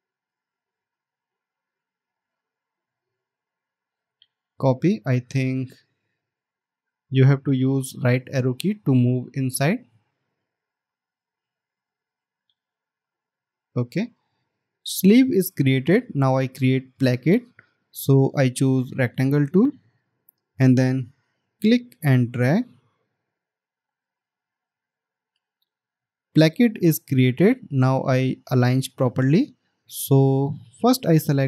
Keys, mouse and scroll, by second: 3.4 alt+click, 6.3-7.2 alt+scroll up 1, 10.1 Right.